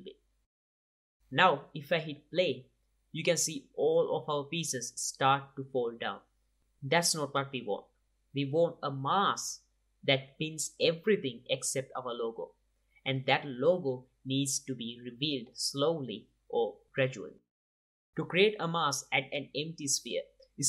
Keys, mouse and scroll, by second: 0.5 click, 0.8 click, 1.1 z, 1.4 space, 4.8 space, 6.1-10.2 drag, 10.8-14.0 drag, 16.6-18.1 drag, 18.2 shift+a.